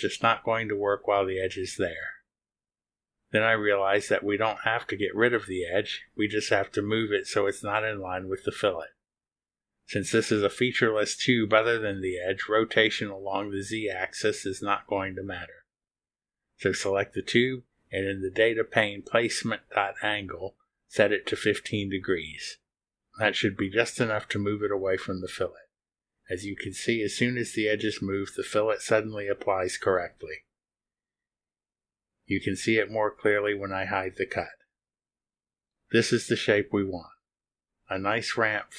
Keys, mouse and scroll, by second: 18.5 click, 19.7 1, 20.7 5, 24.2 click, 28.8 click, 29.3 space, 31.5 click, 35.1 click, 35.4 space.